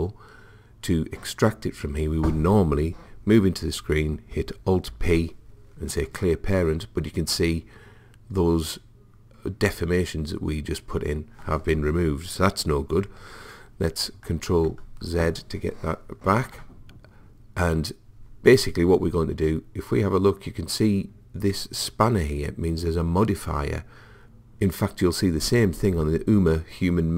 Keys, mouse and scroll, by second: 4.9 alt+p, 14.4 ctrl+z.